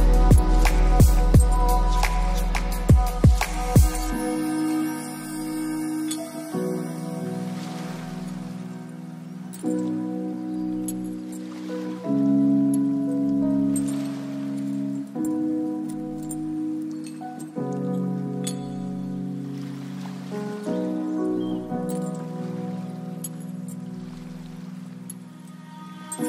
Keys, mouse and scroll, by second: 0.6 middle click, 0.8-3.9 typing, 1.2 middle click, 1.8 scroll up 4, 1.9 scroll down 4, 2.8 scroll up 1, 3.4 scroll down 3, 4.3-4.7 middle drag, 4.7-5.3 scroll up 4, 5.6 scroll up 1, 5.8 middle click, 6.1 g, 6.5 r, 7.1 click, 8.2 scroll down 5, 8.4 click, 8.6 middle click, 8.8 r, 9.2 ctrl+z, 9.5 h, 9.7 middle click, 9.9 g, 10.8 middle drag, 11.0 scroll up 2, 11.2 g, 11.6 middle click, 11.8 g, 12.6-13.1 middle drag, 13.1 right click, 13.3-14.5 drag, 14.5 middle click, 14.5 right click, 14.7 r, 14.9 g, 15.3 r, 16.2 g, 16.8 middle click, 17.2 click, 17.5 middle click, 17.7-19.0 typing, 17.9 middle click, 19.7 click, 21.1 click, 21.3 middle click, 21.5-24.2 typing, 21.7 middle click, 23.1 click, 25.1-25.6 middle drag, 25.6 scroll up 2, 25.8 g.